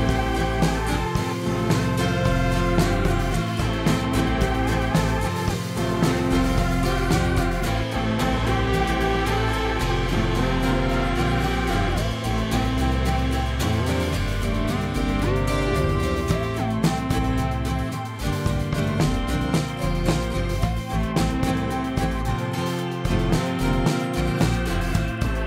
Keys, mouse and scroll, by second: 1.3 shift+d, 3.0 scroll down 2, 3.3-4.1 shift+middle drag, 4.1 shift+d, 6.6 shift+d, 9.8 shift+d, 12.5 s, 13.6 g, 14.6 s, 16.3 shift+d, 17.7-18.2 scroll down 4, 18.4 click, 18.7-19.1 scroll up 2, 19.1 click, 20.1 shift+middle click, 20.8 shift+d, 23.9 scroll up 3, 24.2-25.2 shift+middle drag, 25.2 g.